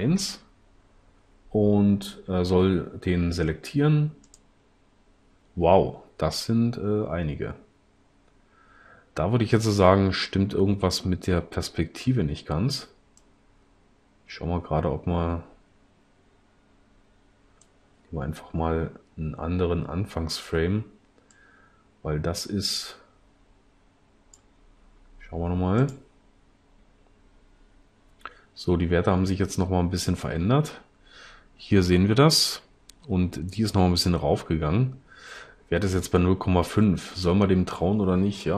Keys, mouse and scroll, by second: 0.0 Return, 13.3-14.0 drag.